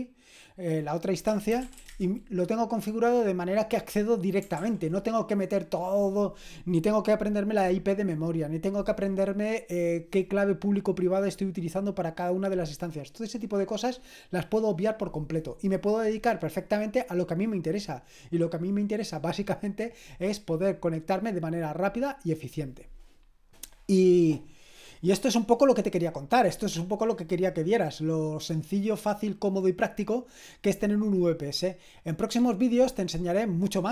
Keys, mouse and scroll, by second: 1.0-2.3 typing, 4.6 ctrl+l.